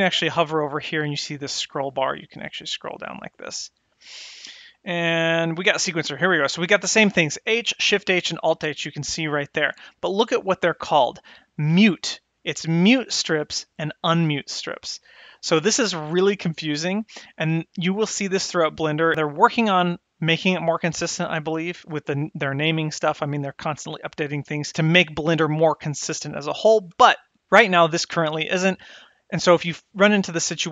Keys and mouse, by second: 1.5-5.7 drag.